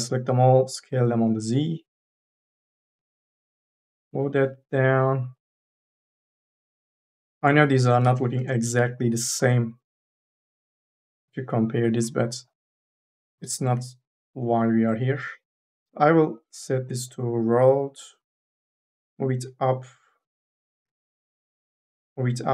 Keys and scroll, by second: 3.2 1, 3.6 e, 7.5 3, 8.2 ctrl+a, 8.6 t, 13.0 2, 14.0 e, 20.7 3.